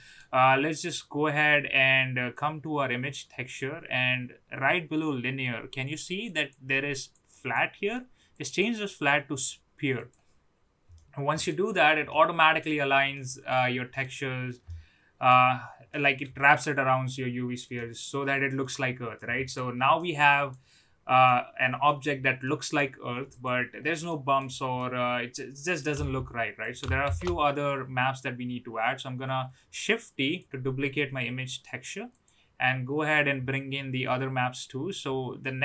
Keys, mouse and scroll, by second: 2.3-3.5 drag, 6.4 click, 7.3 click, 8.6-10.1 drag, 10.9-11.5 middle drag, 12.1-12.6 middle drag, 13.1-14.0 middle drag, 14.6-15.2 middle drag, 15.9 middle drag, 17.7-18.6 middle drag, 19.1-19.5 middle drag, 19.9-20.5 middle drag, 21.2 middle click, 22.4 middle click, 23.3 click, 24.1-24.4 middle drag, 24.7-25.7 middle drag, 26.6 click, 27.0 shift+d, 32.0 click.